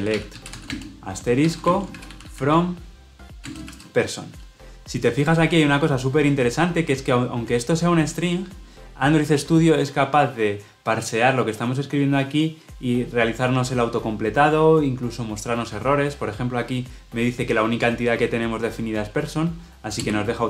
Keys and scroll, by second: 20.0 Return.